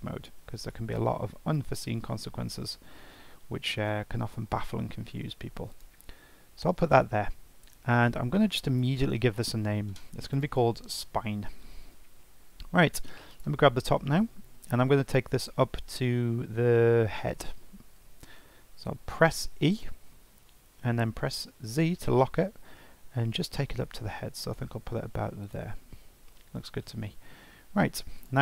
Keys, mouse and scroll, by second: 8.7 F2, 13.3 click, 19.8 e, 28.2 click.